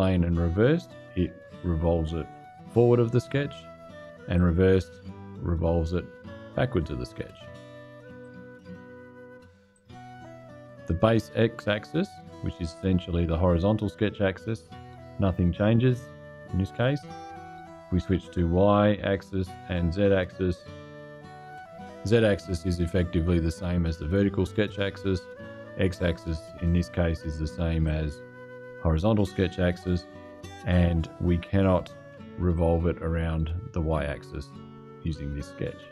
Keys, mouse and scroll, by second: 4.1 click, 8.0 click, 9.5 click, 11.9 click, 16.5 click, 18.8 click, 19.5 click, 21.0 click, 25.6 click, 27.6 click, 32.3 click.